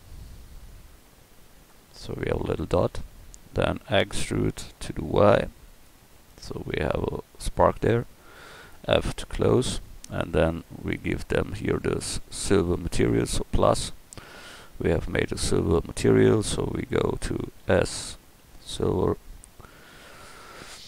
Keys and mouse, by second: 2.0 middle click, 3.7 e, 6.2 click, 8.8 f.